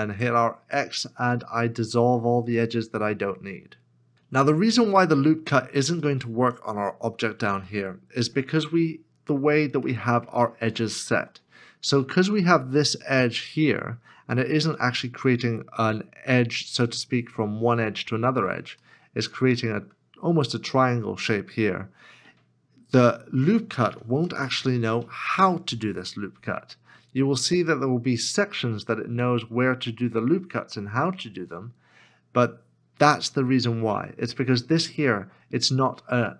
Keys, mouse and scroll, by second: 0.1 x, 4.3-4.8 scroll down 1, 5.1 shift+middle click, 6.8-7.6 scroll up 1, 7.7 middle click, 8.7 shift+middle click, 9.9 middle click, 10.8 shift+middle click, 18.9 shift+middle click, 24.2 ctrl+r.